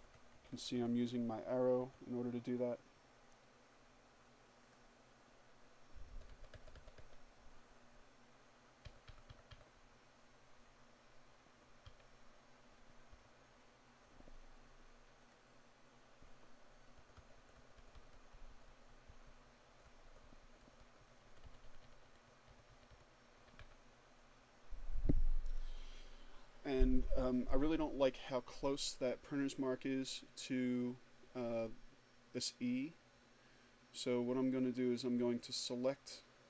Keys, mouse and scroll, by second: 0.4 Left, 3.4 click, 4.8 Down, 7.6 Up, 10.6 Up, 11.8 Up, 13.9 click, 15.5 Down, 20.0 Left, 21.9 Up, 34.2-36.4 drag.